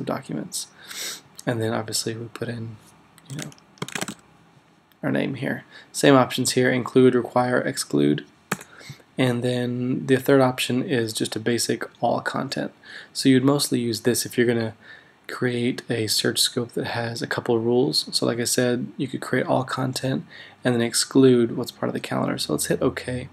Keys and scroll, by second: 3.6-4.6 typing, 8.5 BackSpace.